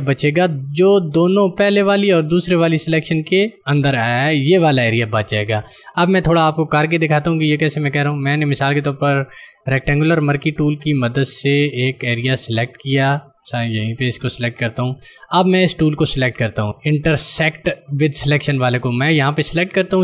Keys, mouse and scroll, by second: 8.5 click, 12.4 click, 18.6 click.